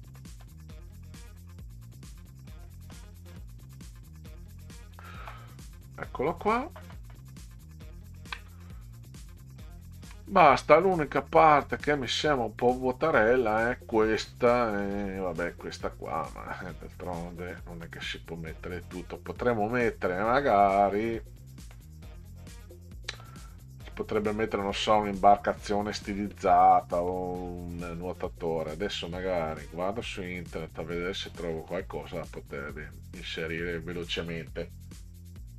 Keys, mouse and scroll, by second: 0.2 middle drag, 2.7 middle drag, 3.1-3.4 middle drag, 5.1 click, 6.1-6.4 ctrl+scroll down 2, 7.8-8.2 ctrl+scroll down 2, 9.8 ctrl+scroll down 2, 11.6-12.7 middle drag, 14.6 middle click, 17.4-17.9 middle drag, 21.8-23.2 middle drag, 26.8 middle drag, 29.5-31.7 middle drag.